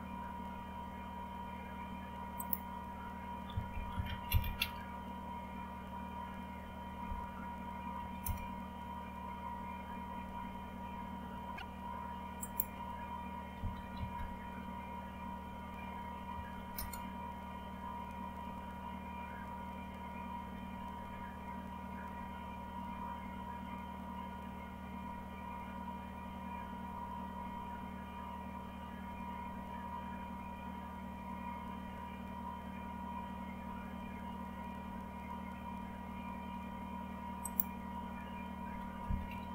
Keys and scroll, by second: 9.5 typing, 9.7 Return, 13.5 typing, 16.1-16.9 typing, 38.7-39.5 typing.